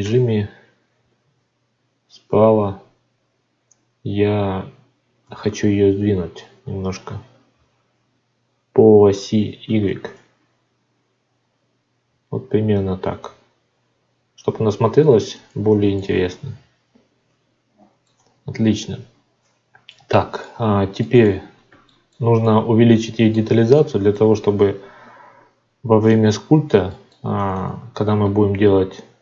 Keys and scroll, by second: 18.1 Tab, 24.2 Tab.